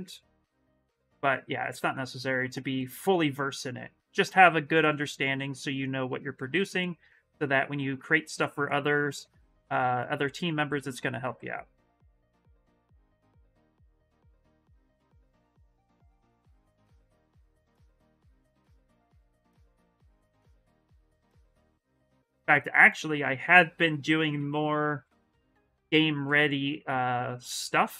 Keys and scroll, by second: 18.6 s.